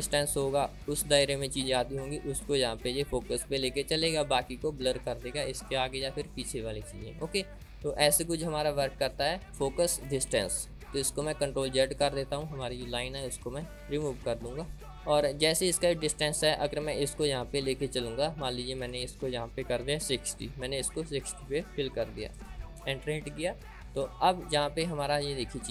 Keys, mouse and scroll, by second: 12.2 ctrl+z, 14.5 ctrl+z, 14.9-18.7 drag, 21.4-25.7 drag.